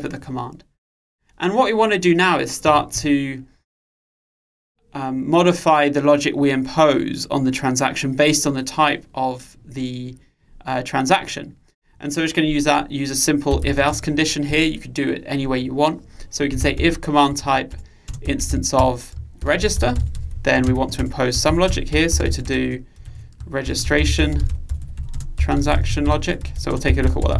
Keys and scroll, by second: 19.7 Return.